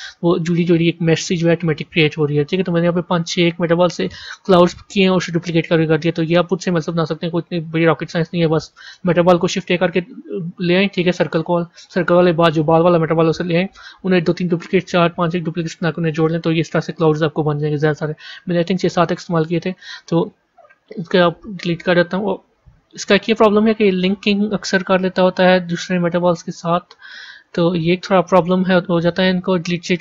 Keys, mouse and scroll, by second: 0.3-3.0 middle drag, 3.0 scroll up 2, 3.9-5.6 middle drag, 5.6-6.2 scroll down 1, 6.2-7.4 middle drag, 7.4-7.8 scroll down 1, 9.3 shift+a, 20.5 Delete, 20.8 click, 21.2 Delete, 22.5 ctrl+z, 23.2 click, 23.8 click, 25.7-27.2 scroll down 3, 27.2 click, 28.3-30.0 right drag.